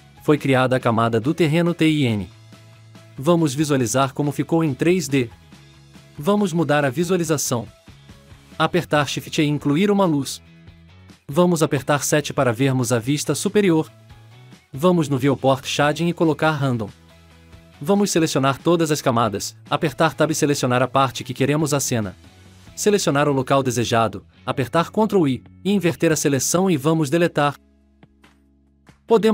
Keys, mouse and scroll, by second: 0.2 shift+middle click, 0.8-1.6 scroll up 6, 1.1 shift+middle click, 1.6 middle click, 2.6-3.0 scroll down 9, 3.4-4.0 scroll up 5, 6.5 click, 6.9 shift+a, 9.1 scroll down 3, 9.4-9.7 scroll up 3, 9.8 scroll down 2, 10.1 click, 12.9 scroll down 2, 13.4 click, 13.8 KP_7, 15.0 click, 15.5 click, 18.4 click, 18.9 click, 19.5 ctrl+click, 19.9 ctrl+click, 22.5-24.3 drag.